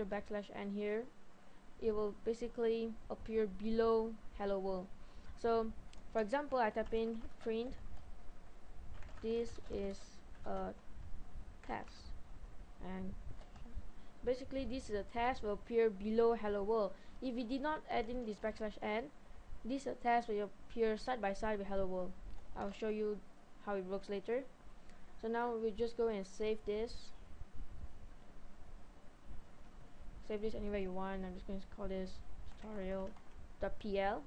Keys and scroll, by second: 6.3 Return, 6.7-7.9 typing, 9.1-10.4 typing, 11.7 typing, 13.3-13.6 typing, 22.8 typing, 32.5-33.2 typing.